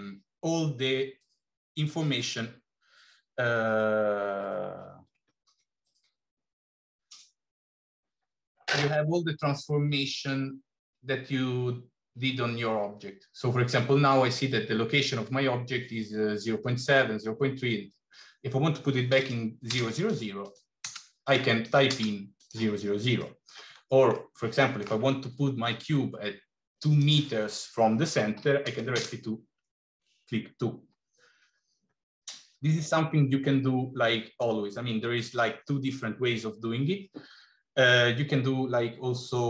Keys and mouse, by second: 19.1 click, 20.4 click, 21.6 click, 23.1 middle click, 24.1 middle click, 26.8-30.9 drag.